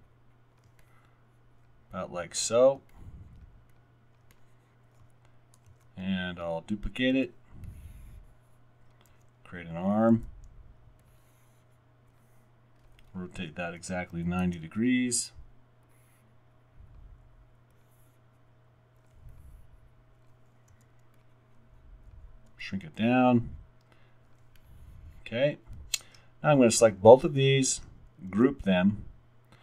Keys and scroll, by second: 5.7 super+d, 7.2 w, 9.2 r, 10.2 e, 13.8-15.8 typing, 14.4 Return, 16.9 w, 20.7 alt+r, 22.5 w, 23.0 w, 28.3 super+g.